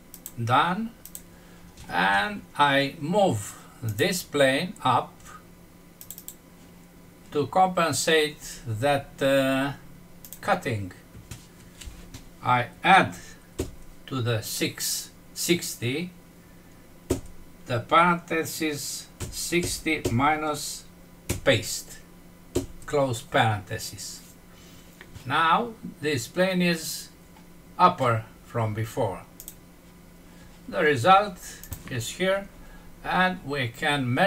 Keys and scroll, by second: 21.2 ctrl+v.